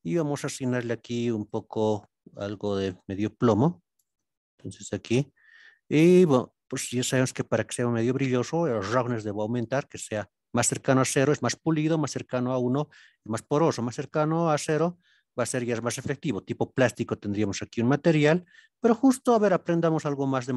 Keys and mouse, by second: 0.4 click, 7.0-8.5 drag, 10.0-14.9 drag, 17.5 middle click, 19.7-20.5 drag.